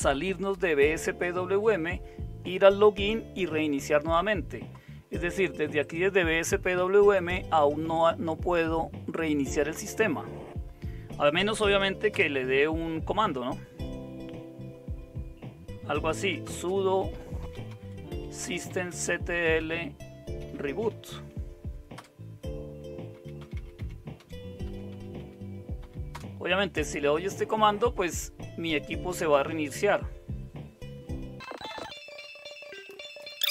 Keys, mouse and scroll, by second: 12.1 super+Return, 15.9-21.4 typing, 22.0 Return, 22.9-26.1 typing, 33.2 Return.